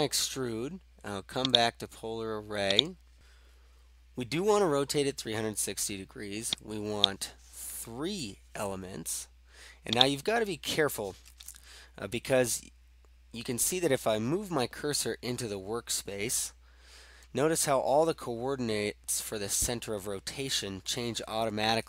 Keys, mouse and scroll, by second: 1.6 click, 2.9 click, 7.0 click, 8.2 3, 10.0 click.